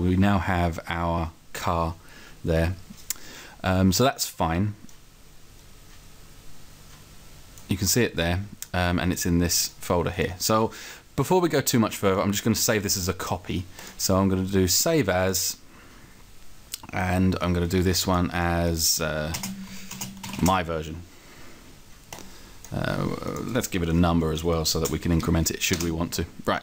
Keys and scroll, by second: 24.0 Right, 24.9 Right, 25.7 Return.